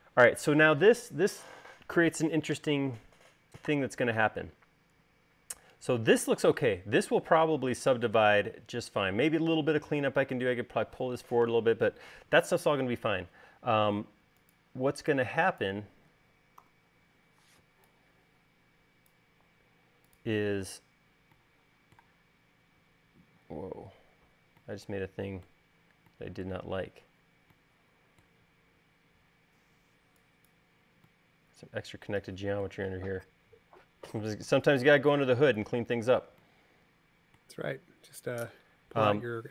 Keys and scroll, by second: 13.7 space, 16.8 v, 30.0 e.